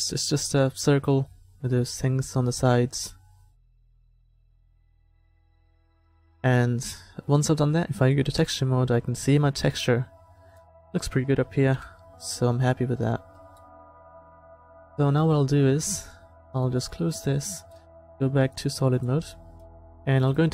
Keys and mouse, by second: 1.2 s, 1.8 click, 9.6-10.6 drag, 11.8 KP_7, 14.9 KP_7, 18.3 middle click, 19.4-20.5 middle drag.